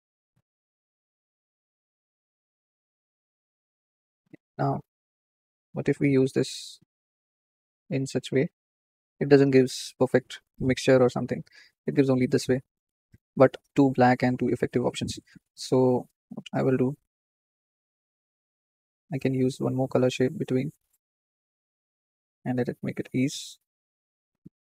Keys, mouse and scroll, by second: 1.3 Tab, 2.8-6.3 drag, 9.8-12.5 drag, 12.5-13.6 shift+middle drag, 13.6 scroll up 2, 16.3-20.2 drag, 22.6-24.7 drag.